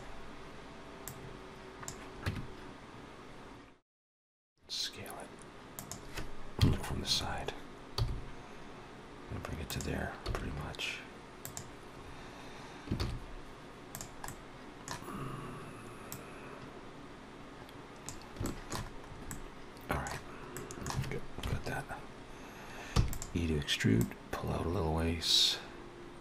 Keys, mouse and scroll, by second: 0.9 click, 2.1 Tab, 4.1 s, 6.4 KP_3, 7.8 g, 10.1 s, 12.9 shift+s, 14.1 middle click, 15.0-15.4 scroll up 2, 16.0 click, 18.3 shift+middle click, 18.9 scroll up 2, 19.1 middle click, 20.4 middle click, 20.5 shift+middle click, 21.3 KP_Decimal, 22.8 e, 23.8 click.